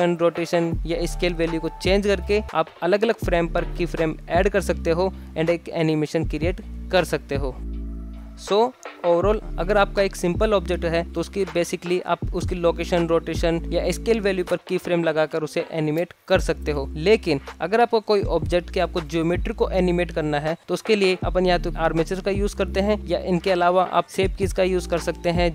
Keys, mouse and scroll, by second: 0.0-1.8 typing, 0.0 click, 0.1 scroll down 2, 0.8 click, 1.3 click, 1.7 click, 2.5-2.8 middle drag, 2.8 KP_1, 2.9-3.5 scroll up 3, 3.5 click, 3.6 scroll down 3, 3.8-7.4 typing, 4.3 click, 4.7 click, 5.3 ctrl+z, 5.4 ctrl+z, 5.6 click, 6.2 shift+Left, 7.0 click, 7.3 click, 8.3 alt+shift+z, 9.2 shift+Left, 12.0 space, 13.4 ctrl+z, 13.6 ctrl+z, 13.9-14.6 ctrl+z, 15.7 alt+shift+z, 17.1 a, 17.1 x, 18.7 a, 19.1 alt+r, 19.9 alt+shift+z, 20.9-21.9 middle drag, 21.9 alt+z, 22.3-22.6 middle drag, 23.0 Tab, 23.9 middle click, 24.0 click.